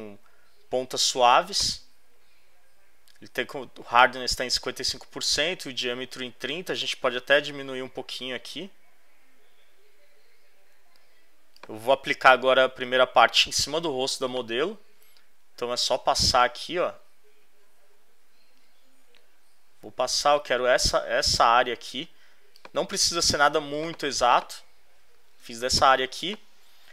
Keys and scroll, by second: 23.4 z, 25.4 space.